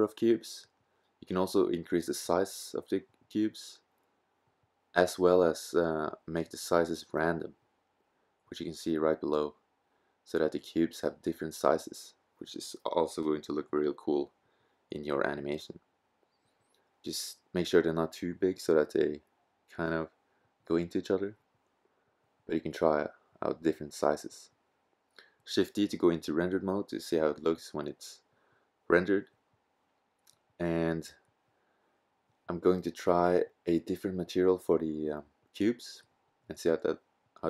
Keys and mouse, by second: 5.7 KP_0, 9.5-11.5 drag, 13.6-22.9 drag, 22.9 shift+z, 31.6-35.6 middle drag, 36.7-37.4 middle drag.